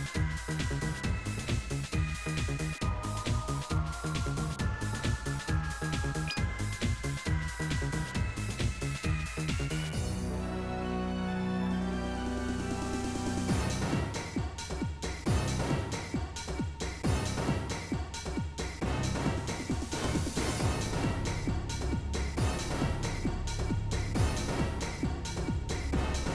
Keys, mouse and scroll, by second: 1.6 ctrl+b, 3.7 scroll, 3.8 middle click, 4.2 3, 4.3 click, 4.6 KP_Decimal, 4.8 middle click, 5.1 scroll down 1, 5.2 middle click, 7.4 KP_Add, 8.4 s, 9.1 e, 10.2-12.2 middle drag, 12.2 s, 13.2 middle click, 13.4 click, 14.0 g, 14.4 middle click, 16.3 middle click, 16.4 e, 17.4 click, 18.0 KP_Add, 18.3 KP_Subtract, 19.6 s, 20.0 e, 20.5-22.1 middle drag, 22.1 scroll up 1, 22.1-23.2 middle drag, 23.2 2, 23.5 alt+click, 24.2 g, 25.3 ctrl+g, 25.8 ctrl+b.